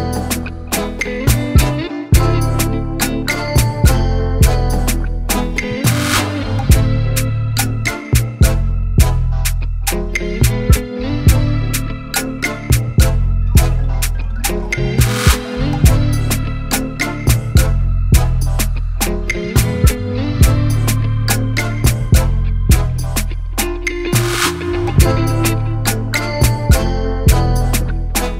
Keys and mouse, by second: 0.6 click, 1.6 click, 3.0 ctrl+z, 3.8 Escape, 4.7 click, 5.9-7.0 typing, 9.0 BackSpace, 9.6 BackSpace, 11.2 click, 11.6-12.6 typing, 12.9 click, 13.7-18.2 typing, 15.2 click, 19.2 ctrl+a, 20.2 click, 22.8-23.8 typing, 24.3 click, 25.5 click, 26.8 ctrl+BackSpace.